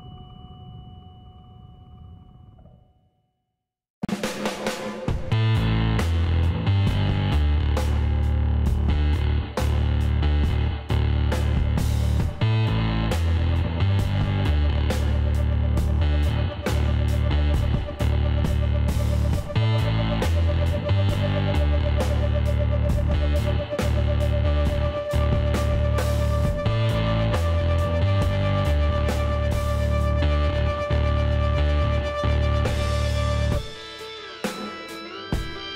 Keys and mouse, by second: 0.4-2.1 drag, 2.1 middle click, 2.5-7.0 drag, 7.3-11.4 middle drag, 7.9 z, 10.7 l, 12.7 s, 15.7-18.5 drag, 17.4 x, 18.8 Tab, 19.1-20.5 drag, 20.3 a, 22.6 Tab, 25.3-27.1 drag, 26.5 l, 27.4 s, 29.8 KP_1, 31.0 z, 32.7 s.